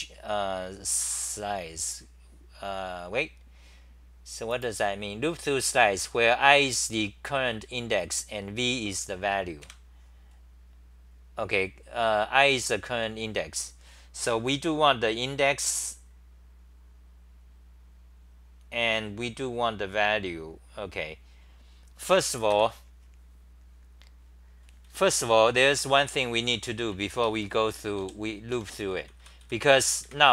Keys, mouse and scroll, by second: 22.5 ctrl+g, 25.5-30.0 typing, 27.1 Return.